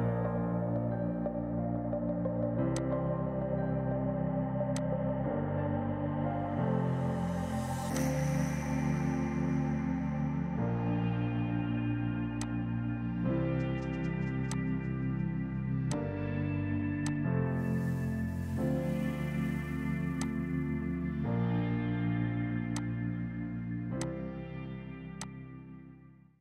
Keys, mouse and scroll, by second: 8.0 click, 9.9 ctrl+z, 10.2 ctrl+z, 10.6 ctrl+z, 11.0 ctrl+z, 12.4 click, 22.3 space, 22.8 alt+click.